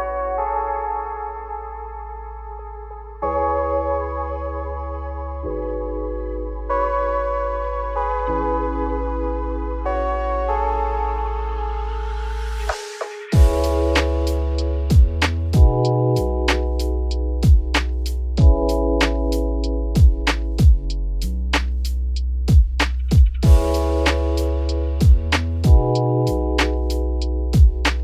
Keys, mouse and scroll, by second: 2.2 click, 9.8 click, 10.4 click, 11.7 shift+d, 13.6 x, 14.6 shift+a, 16.3 g, 17.8 click, 18.7 g, 19.8 r, 21.5 scroll up 3, 23.8 click, 25.1-27.9 drag, 27.9 KP_0.